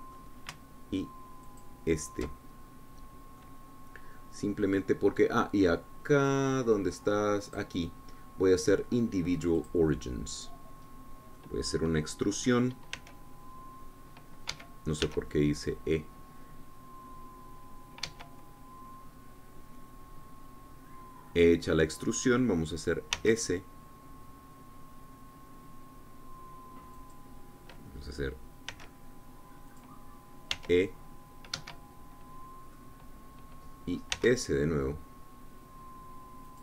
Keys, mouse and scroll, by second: 0.4 click, 2.4 alt+shift+click, 3.5-4.4 alt+shift+scroll down 1, 4.4-6.0 drag, 8.4 click, 10.5 click, 12.4-13.9 middle drag, 13.9 s, 15.5 Escape, 16.0 e, 19.0 Escape, 24.1 s, 28.0-29.7 drag, 29.7 s, 30.7 click, 31.5 e, 32.5 Escape, 33.7 click, 34.5 middle click, 35.1 s.